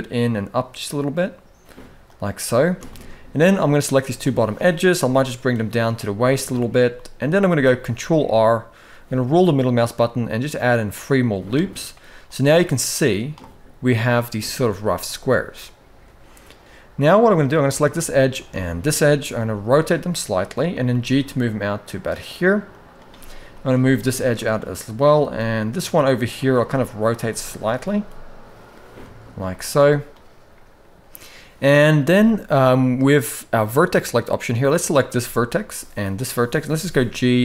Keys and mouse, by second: 2.6 shift+middle click, 4.7 g, 6.6 shift+middle click, 7.5 ctrl+r, 12.0-13.1 drag, 14.5 shift+middle click, 17.2 click, 18.0 shift+click, 19.1 r, 20.6 g, 23.4 g, 24.7 click, 24.9 g, 26.2 r, 27.0 shift+middle click, 27.6 g, 29.2 shift+middle click, 32.0 shift+middle click, 33.5 click, 34.9 shift+middle click, 35.8 shift+click, 36.4 g.